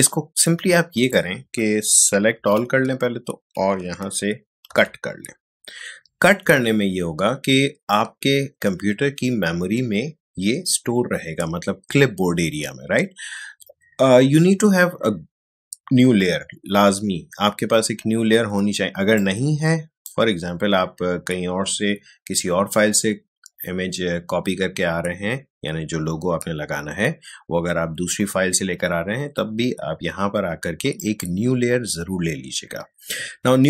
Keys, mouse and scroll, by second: 2.3 ctrl+a, 19.1-22.4 drag, 30.9 click.